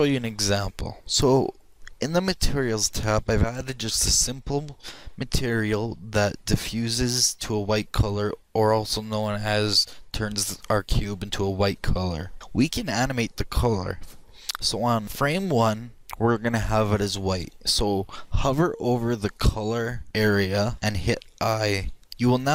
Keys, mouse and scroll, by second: 22.0 click.